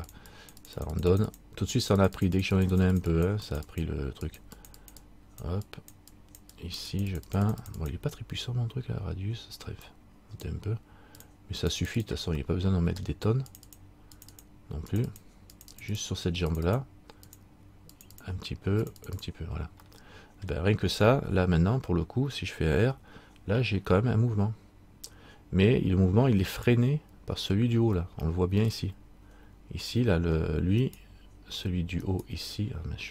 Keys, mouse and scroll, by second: 0.8 click, 12.6 middle click, 13.7 click, 15.8 click, 16.0 click, 16.5-20.0 click, 20.0 middle click, 23.0 r, 28.2 middle click, 31.0 right click, 32.2 right click.